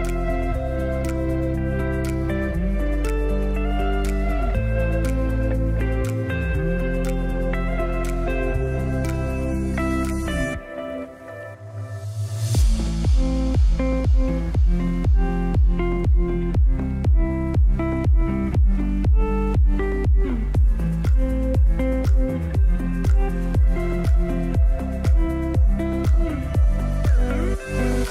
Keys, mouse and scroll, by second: 1.0-1.6 ctrl+drag, 8.6 click, 13.9 click, 14.1-15.6 typing, 17.1-19.7 drag, 25.3 click, 27.8-28.1 scroll down 1.